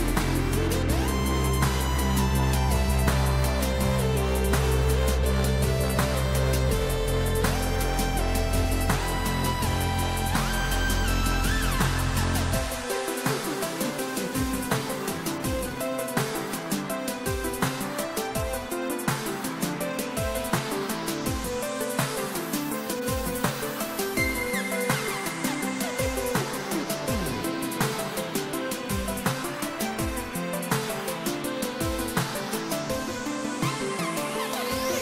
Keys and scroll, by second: 24.9 ctrl+z.